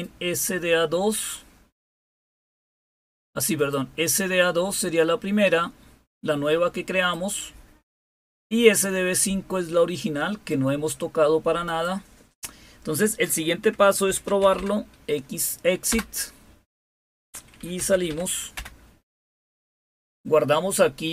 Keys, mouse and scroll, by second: 0.0-2.4 drag, 3.5-4.5 drag, 5.0-7.9 drag, 8.6-11.4 drag, 11.6-12.6 drag, 13.7-15.0 typing, 15.8 Return, 17.4-18.5 typing.